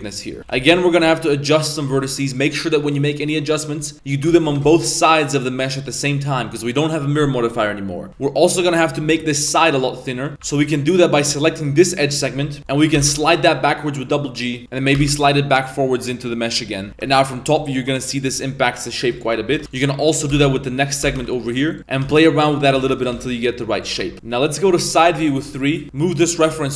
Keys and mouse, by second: 0.5 a, 0.5 b, 1.1 shift+middle drag, 4.3 g, 6.4 Tab, 8.1 z, 9.0 Tab, 10.0 middle drag, 10.3 z, 10.4 2, 10.7 right click, 11.0 middle click, 11.6 ctrl+right click, 12.7 middle click, 12.9 g, 16.9 Tab, 17.3 KP_7, 17.4 Tab, 18.3 z, 19.2 shift+middle click, 19.5 1, 19.6 a, 20.3 g, 21.8 Tab, 22.0-23.1 typing, 24.7 KP_3, 25.8 g.